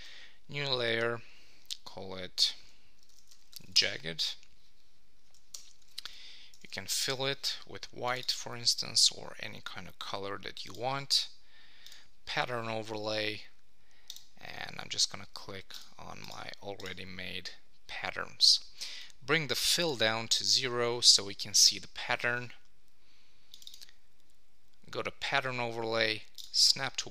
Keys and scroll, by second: 3.7 Return, 5.5 super+BackSpace, 5.8 super+d, 6.6 super+1.